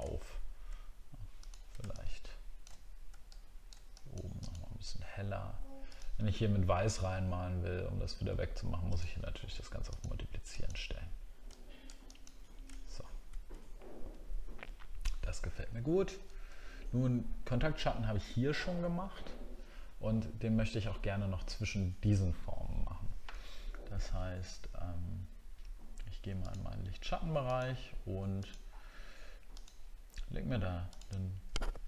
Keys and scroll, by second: 0.1 alt+scroll up 1, 12.8 alt+scroll down 1.